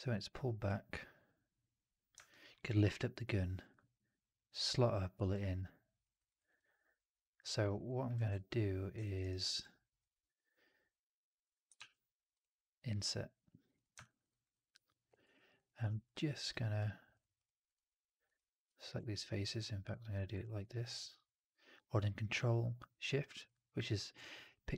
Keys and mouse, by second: 1.8 click, 2.2 alt+drag, 2.4 alt+middle drag, 2.9-3.6 alt+drag, 5.2-5.9 alt+drag, 6.0 alt+right drag, 6.3 alt+right drag, 6.4-7.3 alt+drag, 7.4 alt+middle drag, 7.5 alt+right drag, 7.7 alt+drag, 8.2 3, 8.9 middle click, 9.1 right click, 9.3 right click, 9.5 click, 11.6 shift+Tab, 13.9 alt+click, 14.2 alt+right click, 14.4 alt+click, 20.5-24.7 ctrl+shift+drag.